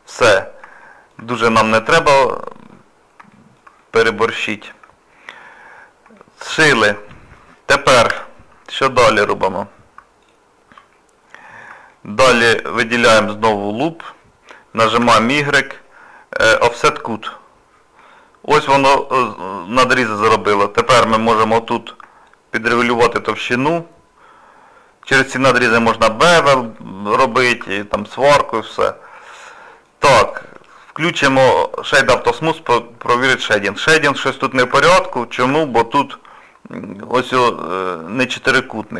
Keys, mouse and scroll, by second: 0.8 shift+middle click, 1.3 middle click, 2.7-3.3 scroll down 3, 3.3 shift+middle click, 3.8 middle click, 4.5 shift+middle click, 5.0-5.3 scroll up 3, 5.8 scroll down 1, 6.2 shift+middle click, 6.8 middle click, 7.6 scroll up 1, 8.1 2, 8.5 scroll down 1, 8.5 scroll up 2, 9.5 click, 10.3 alt+click, 10.9-11.4 scroll down 4, 11.4 shift+middle click, 11.9 middle click, 12.6 shift+middle click, 15.0 y, 18.0 middle click, 22.3 shift+click, 25.9 shift+middle click, 26.7 middle click, 27.6 Tab, 27.9 scroll down 2, 28.4 shift+middle click, 28.9 scroll down 1, 29.0-29.3 scroll up 1, 29.3 middle click, 30.2 click, 30.6 right click, 32.5 middle click, 34.3 shift+middle click, 35.5 Tab, 35.8 middle click, 36.4 scroll up 1, 36.4 scroll down 1, 38.6 shift+middle click.